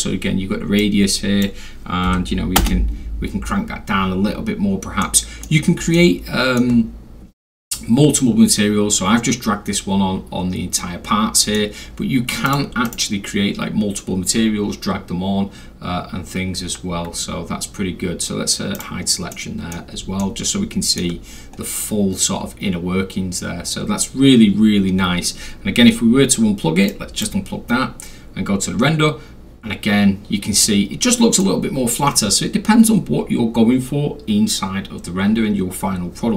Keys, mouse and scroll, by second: 0.8 click, 2.1 1, 2.6 Return, 4.3 scroll down 2, 4.5 scroll, 5.0-5.4 middle drag, 5.0 scroll, 5.9-6.6 alt+middle drag, 10.8-11.5 middle drag, 12.5 click, 12.9 right click, 18.8 click, 19.3-19.7 middle drag, 20.2 alt+middle click, 21.5 scroll up 1, 21.6 scroll, 26.9 click, 29.7-30.1 scroll down 2, 30.1-30.6 scroll, 30.6-31.4 middle drag, 30.6-31.1 scroll.